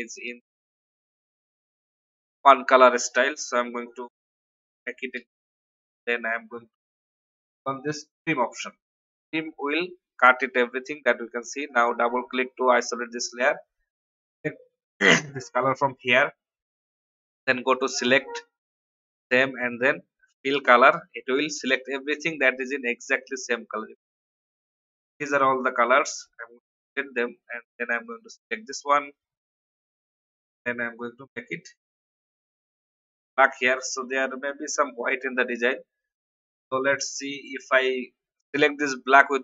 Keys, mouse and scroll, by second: 1.3 alt+scroll down 1, 1.8-4.7 drag, 5.1 ctrl+g, 8.6-12.7 drag, 13.6-14.2 alt+scroll up 1, 15.3 click, 26.7 Delete, 27.9 click, 29.7 ctrl+w, 31.1 i, 31.8 click, 32.6 v, 36.9 y, 39.0 click.